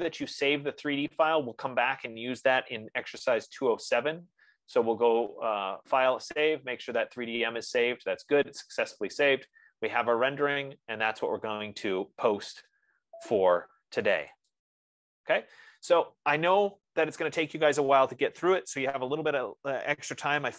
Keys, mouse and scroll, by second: 1.8 click, 15.0-19.8 drag.